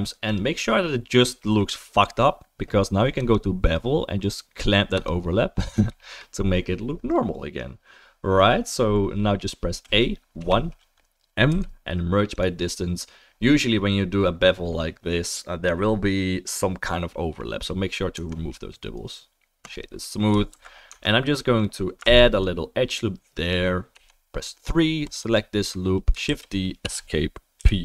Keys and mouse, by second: 3.3-9.9 drag, 3.3-9.9 right drag, 3.7-9.9 middle drag, 9.8 a, 10.4 1, 11.5 m, 14.1-20.3 middle drag, 18.1 Tab, 20.5 ctrl+s, 20.9 Tab, 22.0 ctrl+r, 22.8 click, 22.8 middle click, 22.8 right click, 23.4 click, 23.4-27.8 right drag, 23.9 3, 25.0 click, 25.0 middle click, 25.2 click, 25.2 middle click, 26.3 shift+d, 27.6 p.